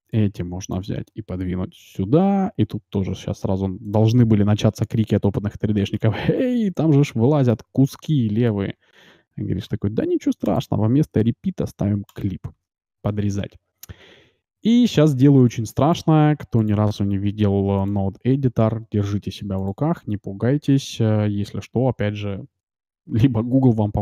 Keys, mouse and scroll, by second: 1.8 g, 4.4-6.7 middle drag, 7.6-8.7 middle drag, 10.4-12.5 drag, 13.1 Tab, 13.6-15.5 middle drag, 15.5-23.9 drag, 20.7 n.